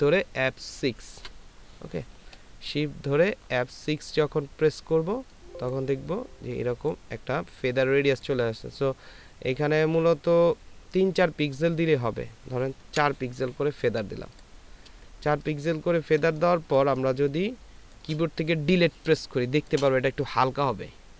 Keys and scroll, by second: 0.7 shift+F6, 13.3 KP_4, 15.1 ctrl+space, 16.8 ctrl+space.